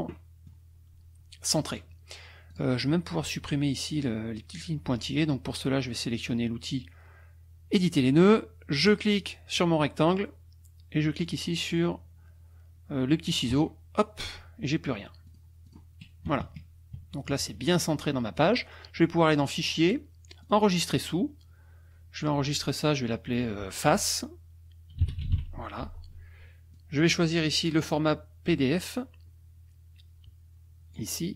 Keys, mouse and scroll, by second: 0.1 middle click, 2.5 click, 8.8 click, 13.5 click, 15.2 click, 15.7 click, 16.2 KP_Subtract, 19.4 click, 20.4 click, 24.7-25.9 typing, 26.7-31.1 drag.